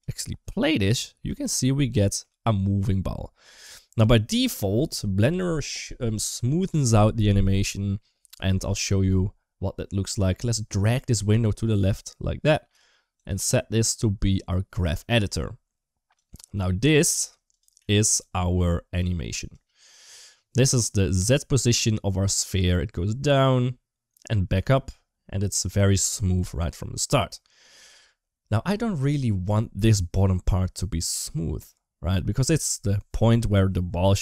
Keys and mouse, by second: 1.0 middle click, 1.8 shift+middle click, 2.4 middle click, 11.1-12.5 drag, 13.0-14.7 drag, 15.9 click, 17.3 click, 17.6 a, 18.0-18.4 middle drag, 19.3 click, 20.1 middle click, 21.2-21.9 middle drag, 29.9-30.9 drag.